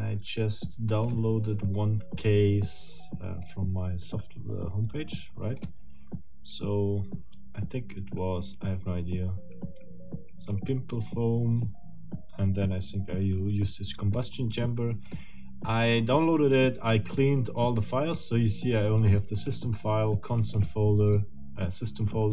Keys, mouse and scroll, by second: 1.0 click, 3.5 click, 5.6 click, 10.5 click, 15.0 click, 19.0 click, 19.5 click, 20.5 click.